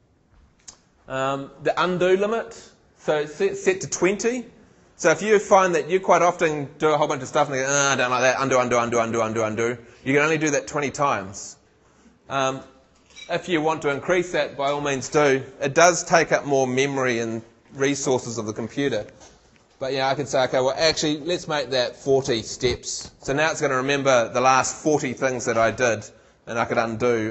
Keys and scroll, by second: 21.9 shift+4.